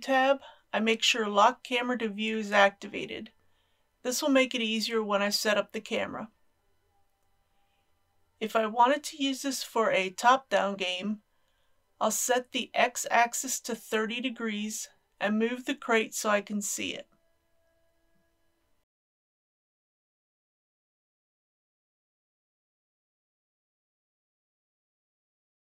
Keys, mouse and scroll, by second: 7.8 click, 15.3 KP_3, 15.4 KP_0, 17.4 click, 18.0 KP_0, 21.6 shift+middle click, 22.0 shift+middle click, 22.4 shift+middle click, 22.7 shift+middle click, 23.0 shift+middle click, 23.3 shift+middle click.